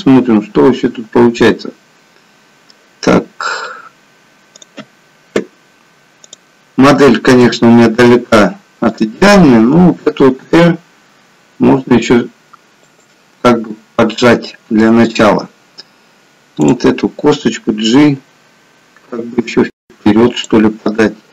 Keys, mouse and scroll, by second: 4.6 click, 6.4 click, 7.6 KP_3, 9.1 click, 10.5 r, 16.7 click, 18.1 g.